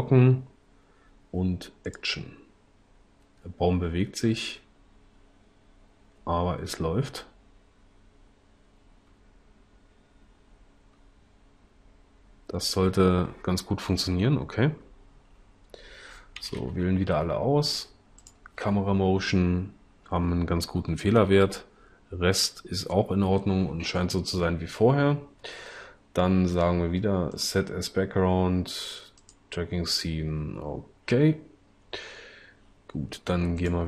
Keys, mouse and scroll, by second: 16.4 a.